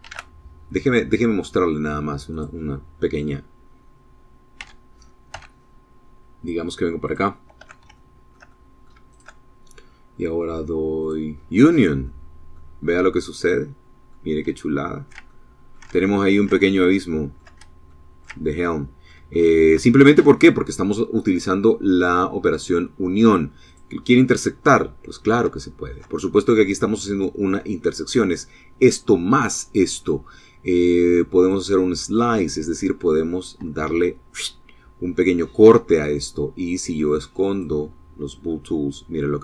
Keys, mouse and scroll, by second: 1.5 click, 3.8 g, 4.5 x, 6.2 click, 7.1-8.5 shift+drag, 10.2 click, 11.3 middle click, 12.3-13.4 middle drag, 13.8-15.6 ctrl+middle drag, 15.6 ctrl+shift+click, 16.1 shift+click, 17.1 ctrl+shift+click, 17.1 ctrl+middle click, 17.6 ctrl+click, 17.6 ctrl+middle click, 18.5 shift+middle click, 19.4-22.9 shift+scroll down 3, 22.9 click, 23.9 middle click, 24.8-26.9 shift+middle drag, 30.6 click, 36.7 click, 37.7-39.4 middle drag.